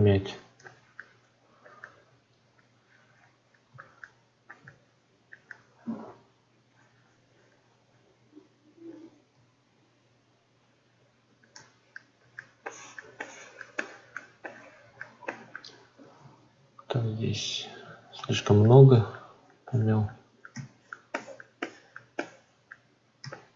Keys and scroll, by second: 16.1 ctrl+z.